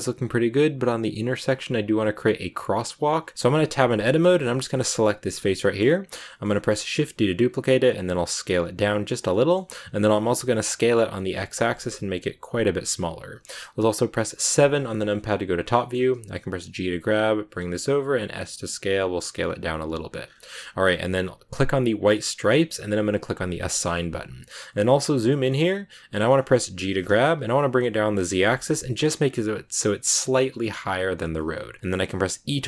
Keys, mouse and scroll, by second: 2.9 scroll down 3, 3.3 Tab, 4.5 right click, 5.2 scroll up 2, 5.4-6.6 middle drag, 6.6 shift+d, 7.9 s, 9.2 middle click, 9.6 s, 14.4 KP_7, 15.2 click, 15.7 shift+middle click, 16.6 g, 20.1-21.9 scroll up 12, 21.9 click, 23.4 click, 23.8-25.0 middle drag, 25.0 scroll up 1, 25.2-26.8 middle drag, 26.8 g.